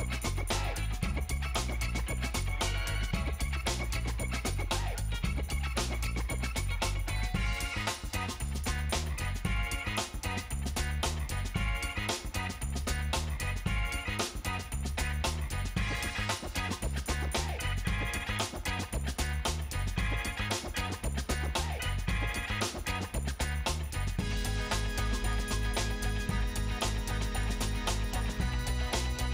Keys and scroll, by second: 22.3 ctrl+space.